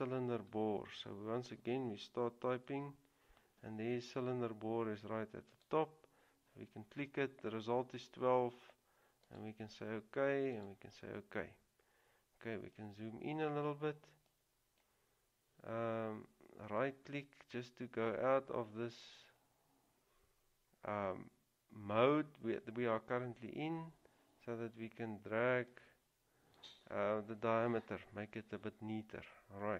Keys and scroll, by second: 2.8 c.